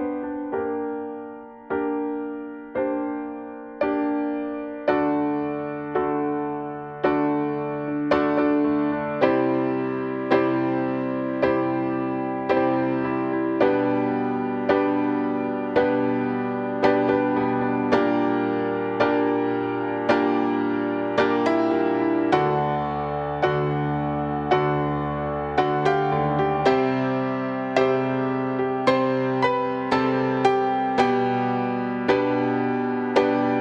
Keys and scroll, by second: 9.8 [, 12.2 [.